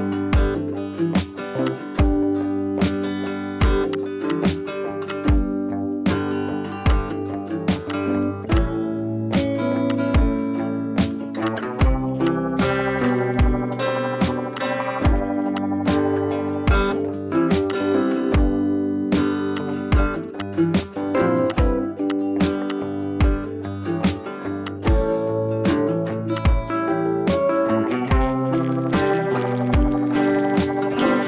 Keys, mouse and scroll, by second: 1.6-2.2 drag, 3.2 ], 3.3 ], 3.6 click, 5.5 ], 5.9 [, 6.8-7.6 drag, 12.8 scroll down 1, 13.0-13.5 click, 13.4 space, 13.4 scroll up 1, 13.8 ], 13.9 ], 15.6 ], 15.8-17.3 drag, 17.4 scroll down 1, 17.6 space, 17.7-18.0 click, 18.0 scroll up 1, 18.7 [, 18.8 [, 19.5-20.2 drag, 21.2 scroll down 1, 21.4 space, 21.4-21.9 click, 21.8 space, 21.8 scroll up 1, 22.1-22.4 drag, 23.7 scroll down 1, 24.2 scroll up 1, 24.6-25.0 click, 25.0 scroll down 1, 25.4 ctrl+z, 25.7 scroll down 1, 26.1 scroll up 1, 26.2 space, 26.3-26.7 click, 26.6 space, 26.7-27.1 scroll down 1, 27.1 scroll up 1, 28.4 click, 30.6 click.